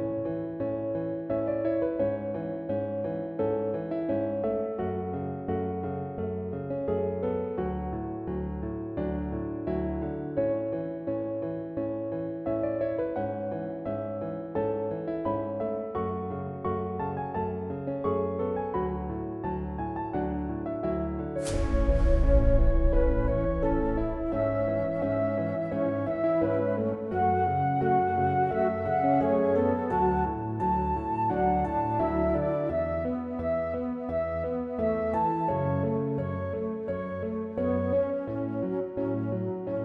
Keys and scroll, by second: 0.8 Up, 1.4 Up, 1.9 Up, 3.7 Up, 4.4 Up, 4.4 Return, 7.4 Delete, 8.9 Delete, 10.6-12.9 typing, 12.9 Up, 12.9 Return, 14.1 typing.